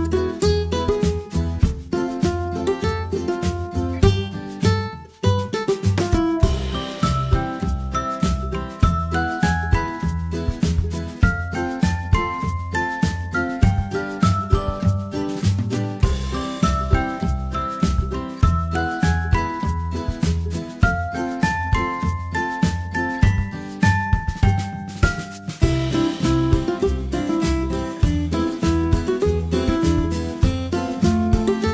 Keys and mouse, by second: 4.7 Tab, 5.3 a, 10.9 ctrl+p, 13.9 a, 19.0 r, 20.6 r, 24.2-24.5 right drag, 24.5 r, 26.0 r, 28.0 r, 29.3 r, 31.0 a.